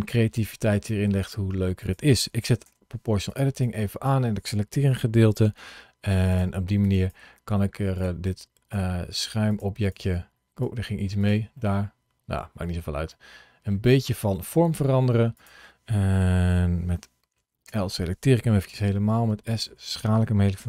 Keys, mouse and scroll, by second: 0.0 g, 1.6 click, 2.5 o, 3.1 click, 3.4 click, 5.4 g, 6.1 click, 6.7 click, 7.0 g, 7.8 click, 8.1 click, 8.6 g, 9.3 click, 9.7 click, 10.5 g, 11.0 click, 11.4 middle click, 14.0 click, 14.4 g, 15.2 click, 17.5 l, 18.5 s, 19.3 click, 20.4 o.